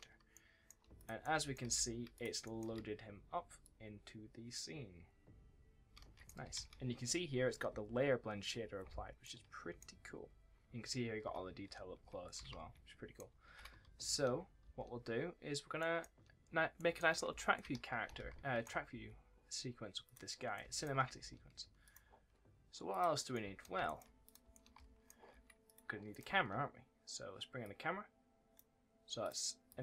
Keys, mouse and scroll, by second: 0.2 click, 0.5 w, 0.9 click, 1.1 right click, 1.2 w, 1.6 s, 2.0 click, 2.3 right click, 2.6 2, 3.5 click, 5.6 d, 6.5 ctrl+s, 9.1 ctrl+s, 10.6-14.5 typing, 10.7-11.1 scroll down 1, 15.7 right click, 15.9-18.8 typing, 16.7 right click, 17.2 scroll up 1, 17.4 right click, 19.9 click, 20.5 s, 21.1 w, 21.7 click, 23.3 w, 23.7 s, 23.8 right click, 24.1 click, 24.3 w, 24.4 right click, 25.6 click, 26.0 right click, 26.1 w, 27.5 click.